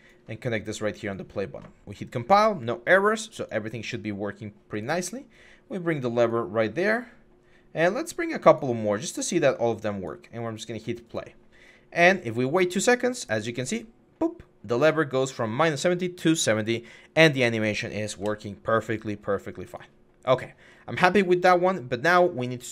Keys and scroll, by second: 18.0 Escape.